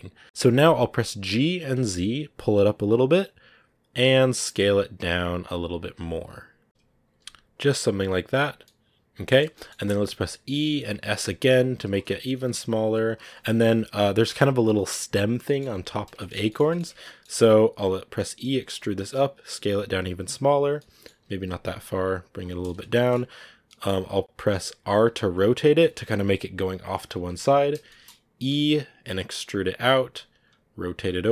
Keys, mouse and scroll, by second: 0.0 middle click, 0.2 g, 0.6-1.1 scroll down 1, 1.1 g, 6.6 g, 8.5 middle click, 9.3 scroll up 1, 9.4 middle click, 9.9 e, 15.3-16.7 middle drag, 16.7-17.2 shift+scroll up 2, 20.6 scroll down 1, 20.7 middle click, 21.1 g, 22.5-24.9 middle drag, 24.9 r, 27.0 scroll up 1, 27.7 shift+middle click, 28.4 e.